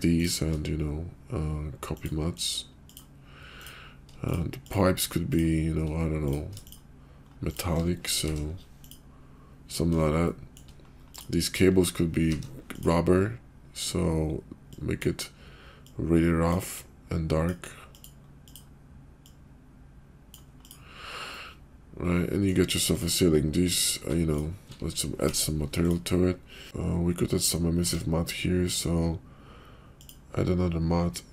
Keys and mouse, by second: 2.4-2.9 drag, 3.6 click, 6.3 click, 8.2 alt+m, 11.1 click, 12.3 alt+m, 14.8 click, 15.9 click, 16.8 click, 17.9 click, 18.5 click, 20.6 click, 21.4-22.5 middle drag, 22.9 click, 25.3 alt+m, 27.9 Tab, 29.9 click.